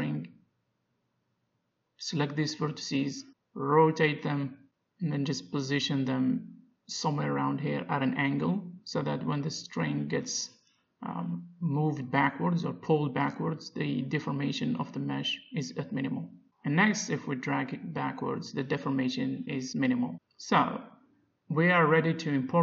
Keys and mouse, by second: 0.3 Tab, 0.3 click, 0.7-2.9 middle drag, 0.7 a, 1.6 b, 4.0 r, 5.7 g, 8.7-11.0 middle drag, 11.0 a, 11.0 click, 11.3 b, 12.2 r, 13.2 r, 13.4 g, 14.6 middle click, 15.5 Tab, 16.0 click, 16.1 g, 17.0 alt+g, 17.0 middle click, 17.5-19.3 drag, 20.9-22.6 drag.